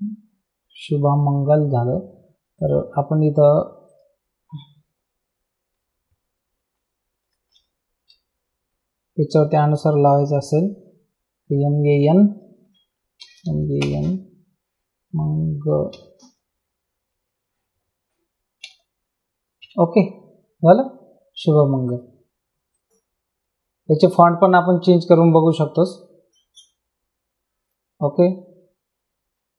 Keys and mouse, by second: 2.5 click, 3.9 click, 5.7 BackSpace, 7.2 click, 8.0 BackSpace, 11.9 click, 12.9-14.3 typing, 15.9 g, 17.1 a, 19.6 Return, 21.9 click, 24.6 click, 27.6 click.